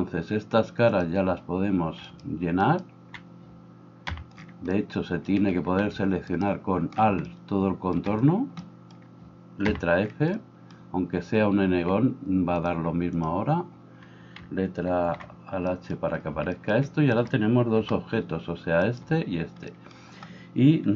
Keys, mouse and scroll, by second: 1.0-20.9 drag, 2.2 right click, 2.6 alt+right click, 9.7 f, 15.0 alt+h, 17.2 right click.